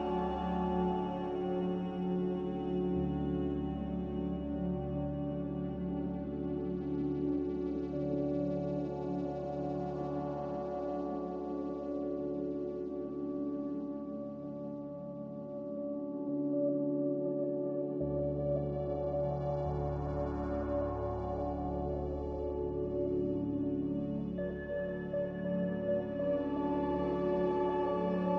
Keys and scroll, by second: 0.6 m.